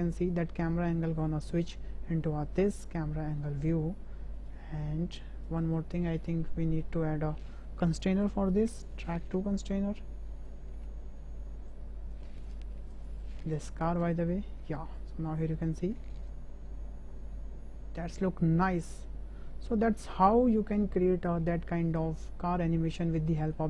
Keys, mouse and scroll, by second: 3.6 space, 5.5 click, 6.8 click, 7.9-8.9 drag, 9.7-10.5 drag, 11.7 click, 12.9 click, 14.9-15.4 drag, 15.4 space, 20.4 space, 22.2 KP_0, 23.0-23.5 drag.